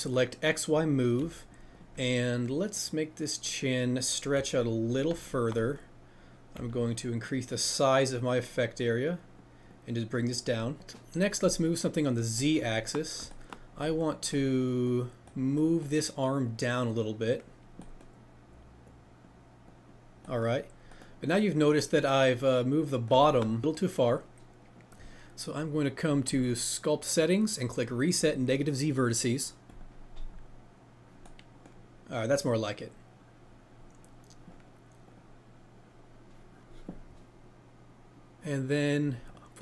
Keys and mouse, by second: 1.1 f, 5.0 click, 6.5 f, 7.3-10.6 drag, 11.5 click, 15.8-17.7 middle drag, 26.2 click, 28.2-30.7 drag, 35.0 click.